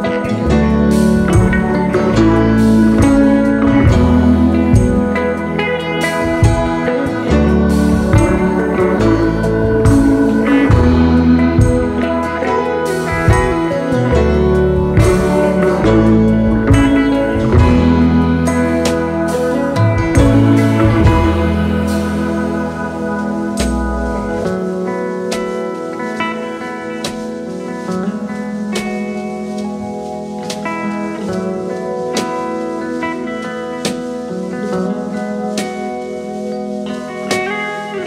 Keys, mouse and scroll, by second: 10.5 shift+click, 11.1 shift+click, 11.8 typing, 12.5 double click, 12.8 alt+scroll up 2, 13.1 space, 13.6 alt+scroll up 1, 18.7 click, 18.8 click, 19.0 click, 19.1 click, 19.8 ctrl+2, 23.9-24.4 scroll up 1, 26.6 alt+click, 32.5 ctrl+a, 32.9-34.0 typing, 35.0-35.6 alt+scroll up 2, 35.4 alt+space.